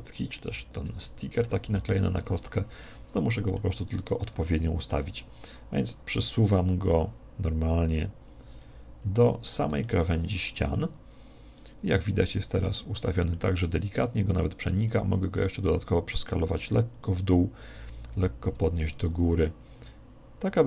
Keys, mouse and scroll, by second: 0.4 ctrl+l, 1.6 KP_1, 2.8-6.0 middle drag, 5.8 click, 9.0-14.4 middle drag, 17.0 click, 17.8 g.